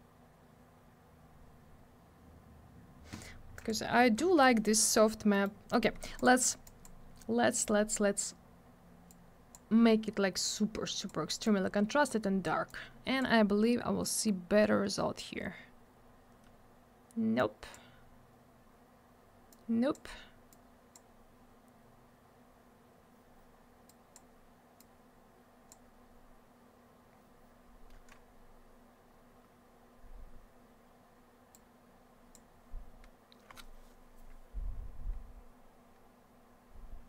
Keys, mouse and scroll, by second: 3.6 click, 3.7 click, 4.2 m, 5.3 middle click, 5.4 middle click, 5.7 middle click, 5.8 middle click, 6.2 click, 6.2 double click, 6.6 click, 6.8 click, 7.6 click, 7.6 click, 9.1 click, 10.5 click, 11.4 click, 12.7 click, 14.2 scroll up 1, 15.9 scroll down 1, 17.4 click, 19.5 click, 20.5 click, 23.9 click, 24.8 click, 27.5-28.8 scroll up 1, 29.4-30.4 scroll down 1, 31.5 click, 33.7-34.0 scroll up 1, 35.2-35.9 scroll down 1, 35.9-36.9 scroll up 1.